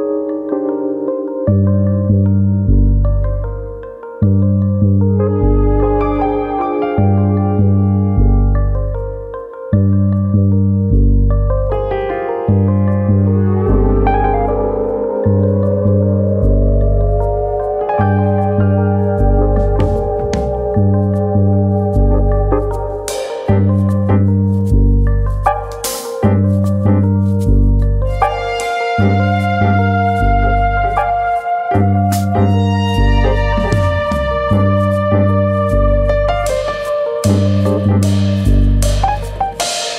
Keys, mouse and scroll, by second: 1.3 right click, 1.7 s, 2.5 click, 2.7-3.2 scroll up 2, 3.0 shift+middle click, 3.2 middle click, 3.9 alt+click, 4.4 s, 5.6 right click, 6.6 s, 9.8 click, 10.0 middle click, 11.0 middle click, 11.9 right click, 13.4 ctrl+z, 13.7 middle click, 14.4 middle click, 15.5 3, 15.8 click, 16.3 shift+click, 17.2 x, 18.6 middle click, 19.3 middle click, 19.9 click, 20.1 l, 20.5 middle click, 21.2 click, 22.5 click, 23.4 middle click, 24.3 middle click, 25.0 middle click, 25.6 click, 26.7 middle click, 27.2 click, 28.0 middle click, 28.6 middle click, 29.1 middle click, 29.4 click, 30.1 middle click, 30.4 scroll up 2, 30.7 middle click, 31.0 shift+middle click, 31.3 shift+middle click, 32.2 1, 32.8 alt+click, 33.4 alt+shift+click, 34.3 ctrl+e, 35.4 middle click, 36.9 ctrl+r, 37.7 right click, 38.0 middle click, 38.5 alt+click, 39.4 x.